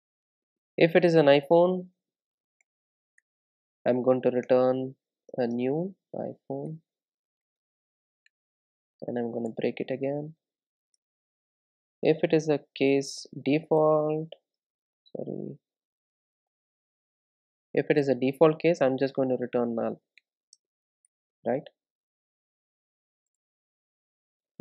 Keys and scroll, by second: 2.7 Return, 14.8 Return, 15.3 super+z, 17.6 Return.